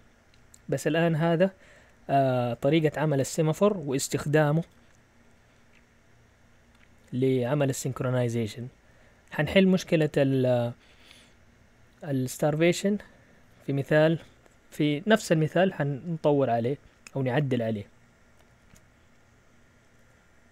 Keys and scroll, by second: 18.5 shift+super+z.